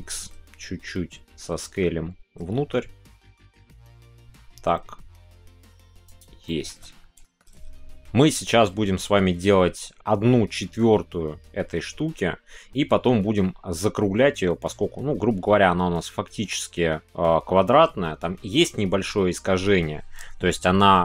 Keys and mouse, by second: 6.0 shift+click, 6.4 shift+middle click, 6.5 shift+click.